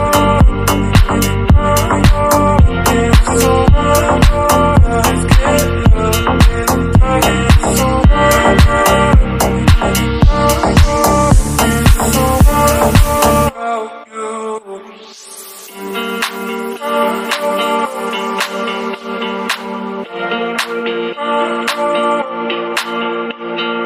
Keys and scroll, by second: 17.4 ctrl+t.